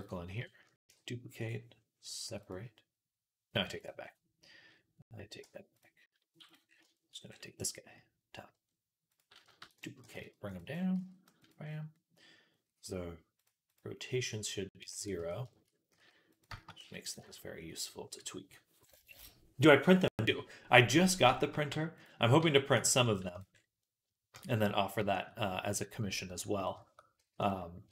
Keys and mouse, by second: 0.7 shift+d, 2.1 p, 3.5 x, 3.8-5.1 middle drag, 5.2 Tab, 6.2 x, 6.6-8.9 shift+middle drag, 8.9 click, 9.0 middle click, 9.4 shift+d, 9.8 g, 10.8 s, 13.5 click, 14.8 ctrl+a, 15.8-24.3 middle drag, 15.8 s, 16.6 s, 20.1 KP_3, 21.5 g, 22.2 r, 22.8 g, 24.4-27.9 shift+middle drag, 26.1 r, 27.0 g.